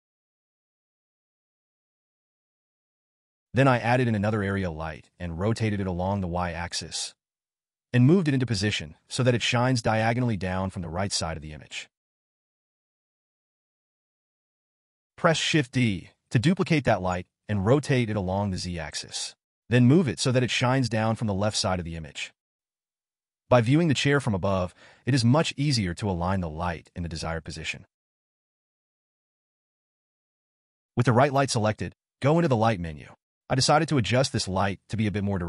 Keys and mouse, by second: 2.2 click, 2.7 shift+a, 5.9 r, 9.1 g, 11.1 g, 16.3 shift+d, 24.1 g.